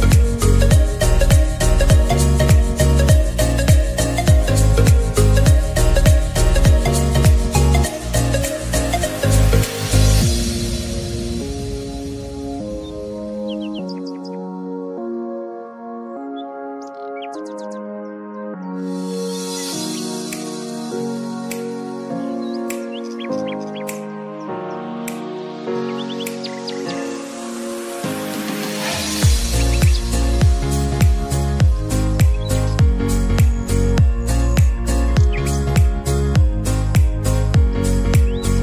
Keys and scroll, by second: 3.9 ctrl+z, 21.4-22.5 typing, 24.9-25.7 typing, 27.3-28.1 typing.